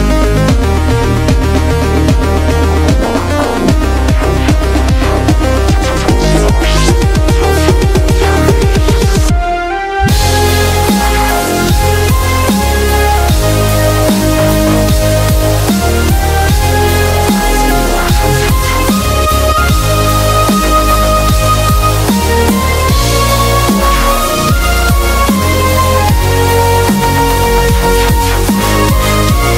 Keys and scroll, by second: 1.7 v, 2.2 shift+Up, 2.5 shift+Up, 2.6 shift+Up, 2.9 shift+Up, 6.9 super+-, 10.5 shift+F5, 18.8 p, 19.1 super+=, 19.2 super+=, 19.3 super+=, 19.5 super+=, 24.5-28.5 typing.